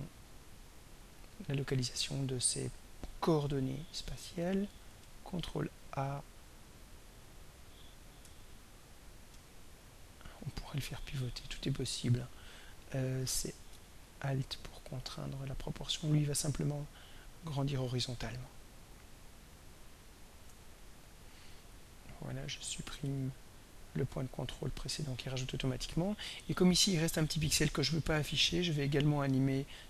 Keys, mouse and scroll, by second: 0.1-1.1 ctrl+scroll up 4, 1.5 ctrl+scroll up 2, 5.0 ctrl+a, 8.2-12.5 ctrl+drag, 13.5-20.0 alt+drag, 23.1 right click, 24.3 click.